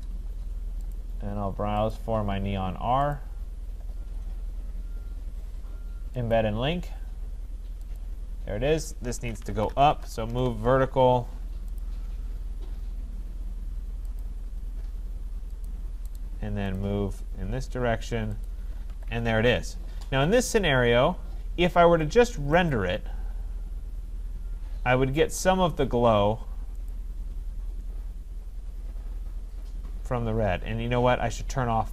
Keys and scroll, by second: 9.8 Return, 18.9 Escape.